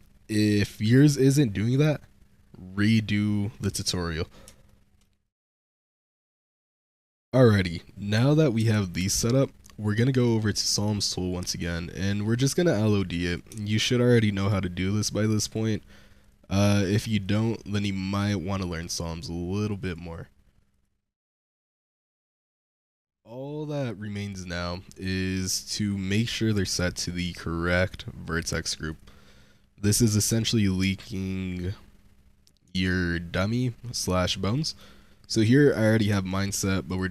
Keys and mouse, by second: 4.6-4.9 shift+drag, 5.1 drag, 6.0 ;, 8.5 n, 10.1 click, 11.4 click, 12.4 click, 13.1 click, 13.5 shift+click, 14.0 click, 15.3 click, 16.1 click, 17.1 click, 18.1 drag, 18.8 click, 19.5 click, 19.7 click, 20.6 click, 21.2 drag, 21.8 click, 22.4 click, 22.6 click, 28.7 click, 30.0 click, 32.7-33.8 shift+drag, 34.4 click, 36.0 Tab, 36.7 click.